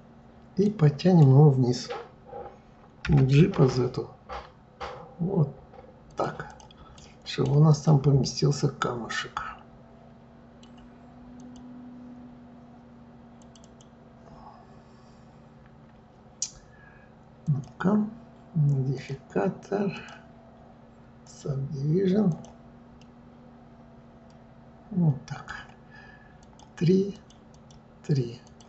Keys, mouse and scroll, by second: 0.6 middle click, 3.0 g, 6.5 click, 6.9 right click, 7.7 click, 8.2-11.2 middle drag, 11.4 click, 13.4 click, 13.6 click, 17.4 click, 18.9 click, 19.9-22.4 drag, 23.0-26.0 middle drag, 26.4 click, 27.1-28.6 drag.